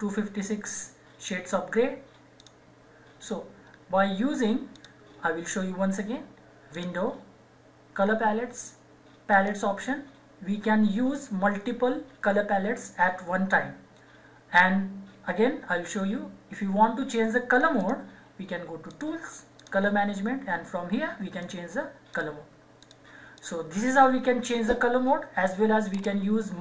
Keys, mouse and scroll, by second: 2.3 click, 4.7 click, 9.6 click, 17.8 click.